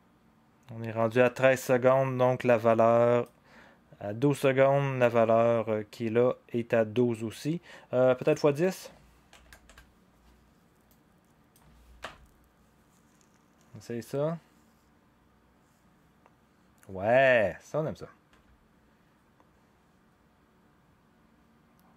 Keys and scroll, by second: 9.6 Return, 9.6 0, 12.0 0.